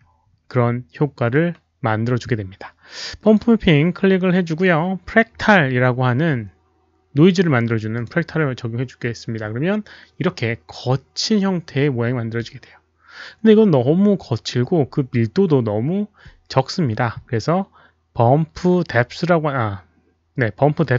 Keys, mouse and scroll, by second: 3.2 click, 7.9 click.